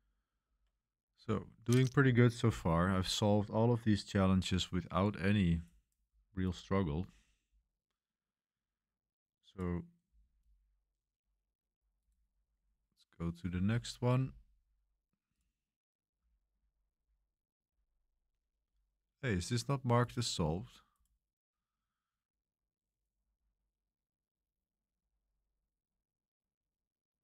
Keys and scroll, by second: 0.4 super+1, 0.7 super+3, 0.7 super+1.